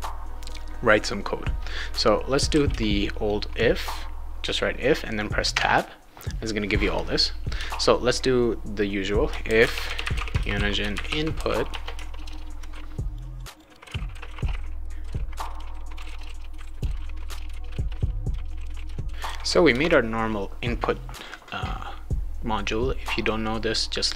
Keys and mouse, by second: 2.1-3.0 typing, 5.5 Tab, 7.6 BackSpace, 9.2-19.2 typing, 13.1 click, 13.3 click, 13.5 click, 19.7 Return.